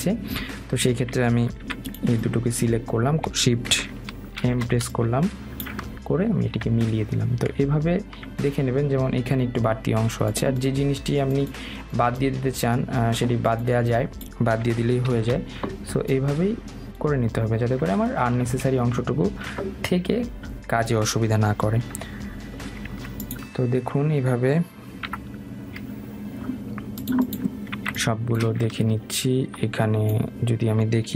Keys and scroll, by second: 24.0 Escape.